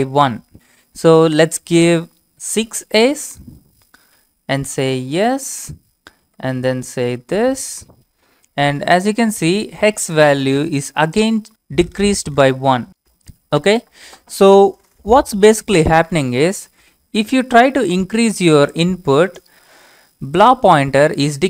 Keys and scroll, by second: 1.6 Up, 2.5 a, 3.1 Return, 4.5 y, 4.6 Return, 6.3 Up, 6.4 Up, 7.1 Return.